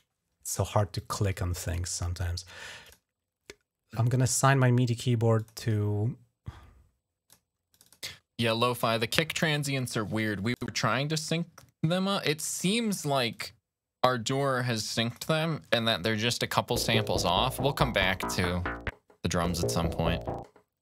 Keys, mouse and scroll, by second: 0.7 click, 2.6 click, 5.1 click, 7.1 click, 7.5 click, 7.7 click, 8.5 click, 10.4 click, 13.1 click, 14.9 click, 15.2 click.